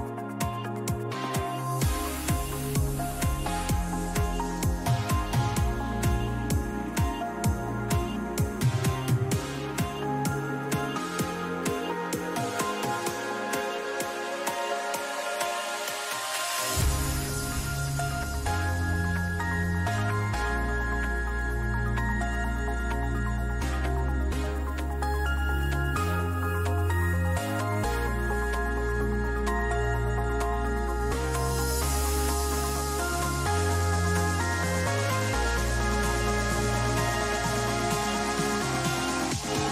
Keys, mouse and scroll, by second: 8.2 a, 8.8-12.0 middle drag, 12.1 middle click, 12.4 middle click, 13.4 middle click, 14.5-17.3 middle drag, 17.3-19.1 right drag, 18.4-20.4 drag, 20.9-23.0 middle drag, 23.0 a, 23.6-25.8 right drag, 24.5-26.6 drag, 26.1 a, 26.6-30.4 middle drag, 30.7-33.3 right drag, 31.7-33.8 drag, 33.8 middle click, 34.4-35.7 middle drag, 37.2 a, 37.7-39.7 middle drag.